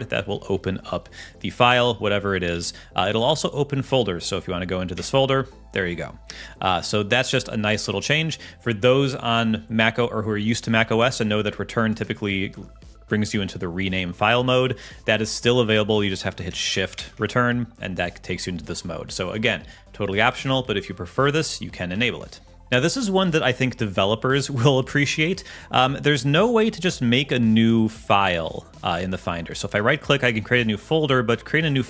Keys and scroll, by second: 2.5 super+q, 3.2 Left, 4.9 Return, 16.9 shift+Return, 21.9 Escape.